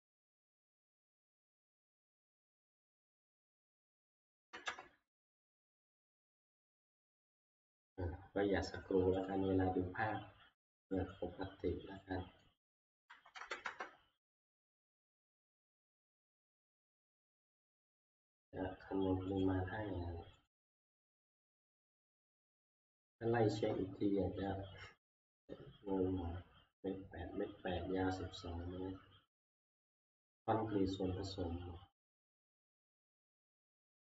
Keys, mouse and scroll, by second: 0.5 middle click, 0.9 click, 1.9 click, 3.8 click, 4.4 5, 4.7 Return, 7.9 middle click, 9.3 click, 11.1 click, 12.4 click, 13.1-13.7 typing, 16.4-16.9 scroll, 17.5 Return, 17.5 middle click, 17.8 middle click, 19.5 click, 20.5 click, 21.9 click, 22.4 scroll.